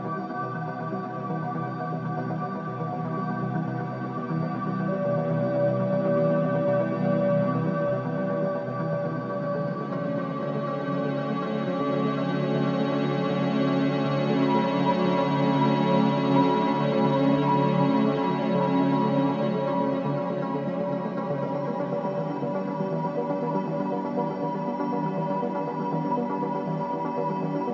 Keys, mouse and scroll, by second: 1.8 scroll up 1, 2.4 middle click, 3.1-3.6 scroll down 3, 3.6-5.2 middle drag, 6.6 s, 12.2 e, 17.8 i, 22.3 click.